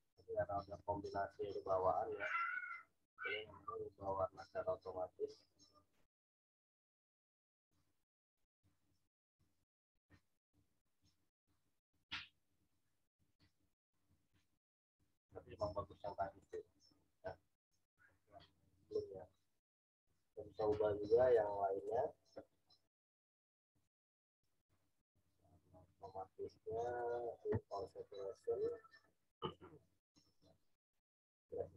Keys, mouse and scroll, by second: 20.0 right click, 20.6 click, 21.3 right click, 21.8 click.